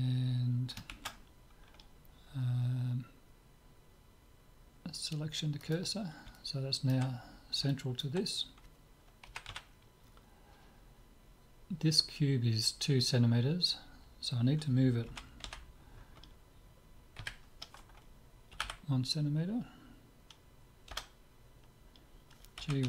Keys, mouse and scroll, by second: 0.9 shift+s, 6.3-9.7 middle drag, 9.3 KP_7, 9.5 z, 10.2-12.2 middle drag, 15.1 g.